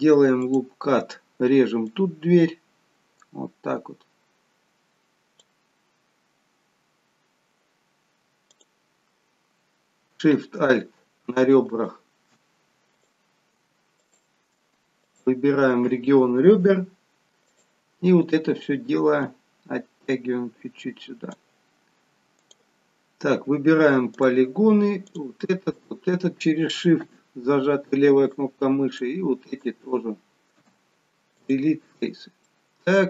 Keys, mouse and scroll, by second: 0.6 click, 2.0 click, 6.1-6.7 scroll up 3, 6.7-7.9 scroll down 1, 8.6 click, 11.9 alt+shift+click, 13.0 click, 14.2 alt+shift+click, 17.6 click, 19.4 click, 22.6 click, 24.3 click, 25.2 click, 25.9 shift+click, 27.2 Delete, 29.1 click, 29.7 shift+click, 30.7 Delete, 32.1-32.6 scroll down 1, 32.6 middle click.